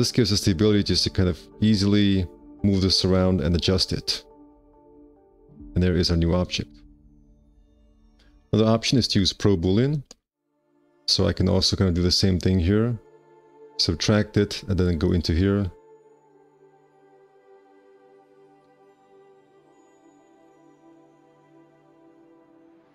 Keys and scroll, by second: 1.5 w, 6.8 1, 6.9 q, 9.7 alt+v, 19.4 `, 19.4 5.